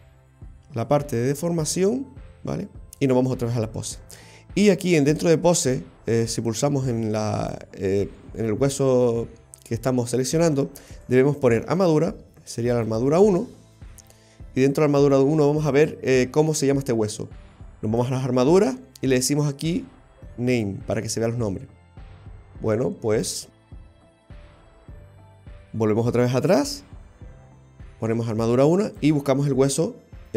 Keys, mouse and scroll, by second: 0.9 click, 5.5 right click, 7.5 click, 11.1 click, 12.3 ctrl+z, 14.9 right click, 17.9 click, 20.6 click, 23.2 click, 23.6 click, 25.2 right click, 28.9 click.